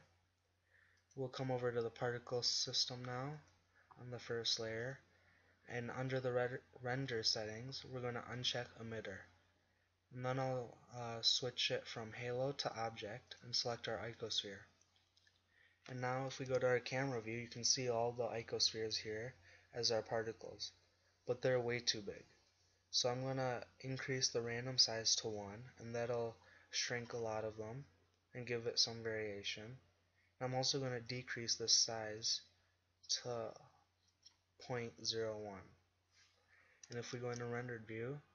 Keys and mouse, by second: 1.4-3.0 middle drag, 10.3-12.8 middle drag, 14.9-16.5 middle drag, 16.5 KP_0, 21.2-22.6 middle drag, 23.6-24.2 middle drag, 24.3-25.9 drag, 26.9 middle click, 30.9-35.6 drag, 37.3 shift+z.